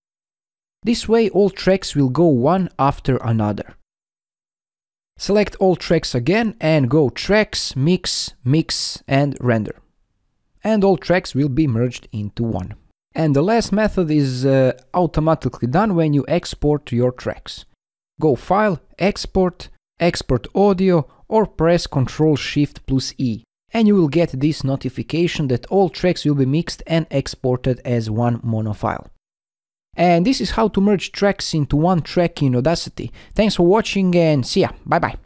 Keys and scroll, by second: 20.6 ctrl+shift+i.